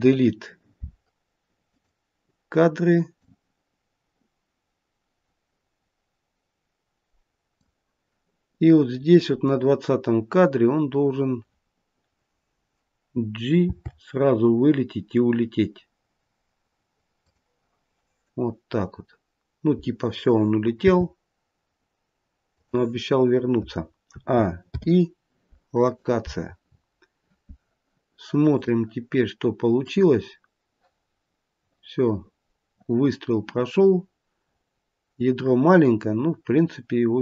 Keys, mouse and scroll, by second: 3.1 click, 9.2-9.6 scroll down 3, 10.1-10.7 scroll down 1, 10.7-13.5 scroll down 1, 13.6 g, 21.1 g, 24.0 a, 24.6 i, 26.5 scroll up 6, 28.4 click, 29.7 click.